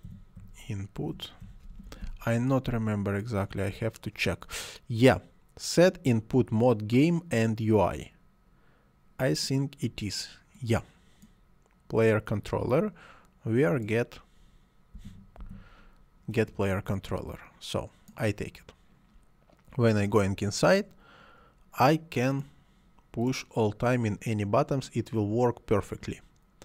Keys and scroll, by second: 0.1-1.9 typing, 14.9 c, 15.4 o.